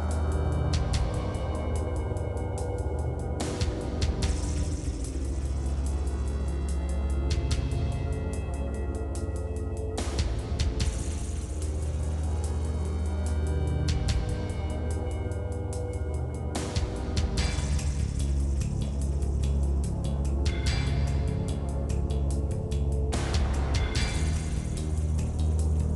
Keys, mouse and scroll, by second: 6.4 ctrl+s, 7.8 middle click, 8.2 scroll down 4, 8.5 middle click, 8.7 click, 8.8 middle click, 9.6 right click, 9.9 click, 10.2 right click, 10.6 middle click, 11.1 scroll down 1, 11.2-12.6 middle drag, 14.3 middle click, 15.9 middle click, 17.4 click, 18.2 click, 18.8 middle click, 19.4 click, 20.8 click, 21.5 click, 22.6 click, 23.7-25.5 drag, 25.5 scroll up 2, 25.6-25.9 middle drag.